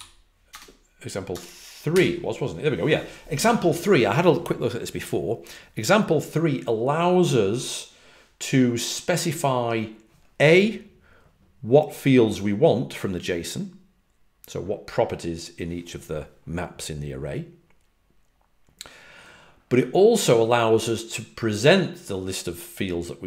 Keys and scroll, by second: 0.0-1.8 typing.